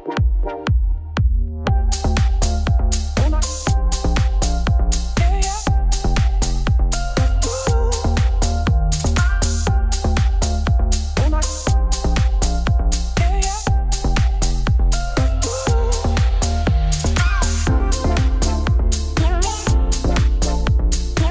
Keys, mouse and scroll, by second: 0.9 middle click, 1.5 z, 1.8 scroll up 2, 2.0 middle click, 2.7 Tab, 2.9-4.1 middle drag, 4.8 Tab, 5.0 middle click, 5.1-5.7 scroll down 1, 5.7 g, 7.0 click, 7.4-8.4 middle drag, 8.4 g, 10.3 middle click, 11.3 KP_1, 11.7 scroll up 1, 12.1 scroll down 1, 12.3 ctrl+r, 13.0 middle click, 13.6 scroll down 1, 13.8 shift+middle click, 14.2 ctrl+r, 17.0 ctrl+r, 20.6-21.3 middle drag.